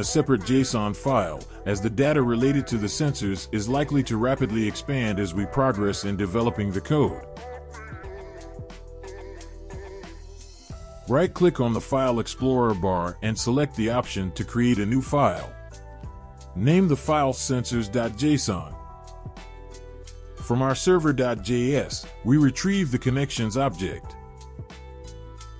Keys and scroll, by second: 15.1-18.6 typing, 18.7 Return.